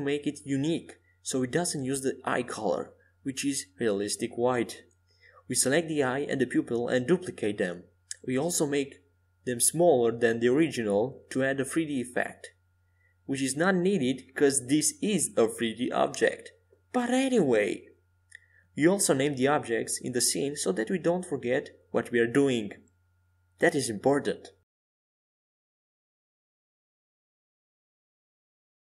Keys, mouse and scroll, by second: 3.1-6.4 drag, 6.8-9.1 drag, 9.5-11.8 drag, 11.8 ctrl+z, 12.6-15.3 right drag, 13.4-15.8 drag, 14.1 ctrl+z, 15.8-18.2 right drag, 16.7-20.6 drag, 21.4-23.6 drag, 24.8-28.8 drag.